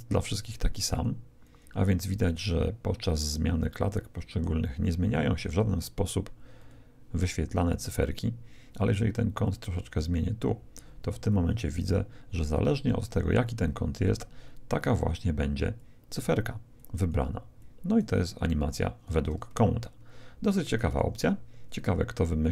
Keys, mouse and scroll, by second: 5.8-8.4 drag, 9.4-11.2 drag, 11.3-20.4 drag.